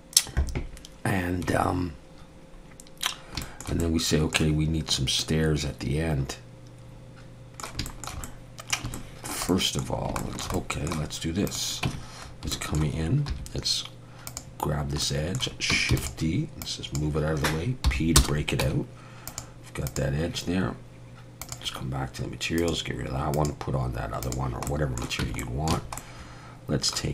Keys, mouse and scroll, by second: 3.1 scroll down 1, 3.4 shift+middle click, 3.8 middle click, 5.2 middle click, 7.9 shift+middle click, 8.3 middle click, 9.0 shift+middle click, 9.5 middle click, 10.0 scroll down 2, 10.2 shift+middle click, 10.5 middle click, 11.5 click, 11.9 Tab, 12.3 scroll up 2, 12.5 shift+middle click, 13.3 2, 14.3 click, 15.0 middle click, 15.9 shift+d, 16.6 click, 17.8 p, 18.6 Tab, 19.3 click, 19.9 click, 23.3 click, 24.7 middle click, 25.2 Tab, 25.4 middle click, 25.7 a, 26.0 middle click.